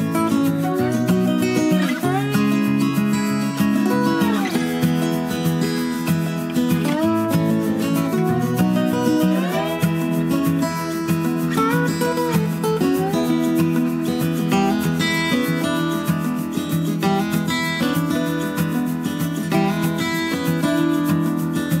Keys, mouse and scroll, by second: 3.0-6.1 drag, 7.4-21.8 drag.